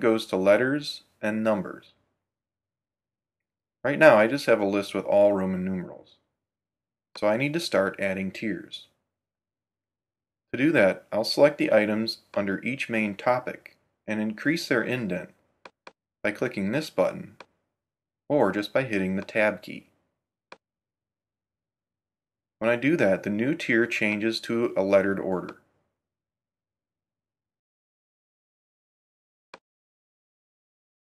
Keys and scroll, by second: 19.2 Tab, 20.2 Right, 21.4 Tab, 22.7 Tab, 25.0 Tab.